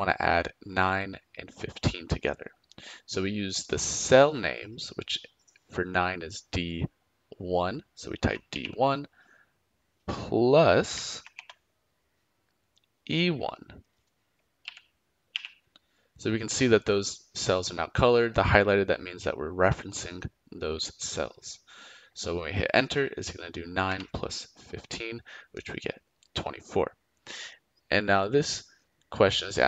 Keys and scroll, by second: 8.2 d, 8.5 1, 11.2 shift+=, 14.6 e, 15.3 1, 23.8 Return.